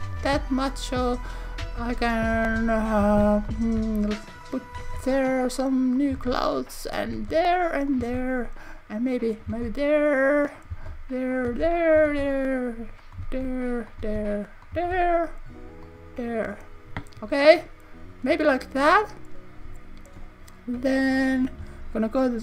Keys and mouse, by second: 0.2 shift+d, 1.1 click, 1.8 shift+d, 2.2 click, 2.9 click, 3.5 click, 4.4 click, 6.0 click, 6.9 click, 7.9 click, 8.1 shift+d, 9.3 click, 9.5 shift+d, 10.5 click, 11.3 click, 12.0 shift+click, 12.2 shift+d, 13.1 click, 13.9 click, 14.2 shift+d, 14.6 click, 14.8 shift+d, 15.8 click, 21.1 KP_1, 21.6 KP_3.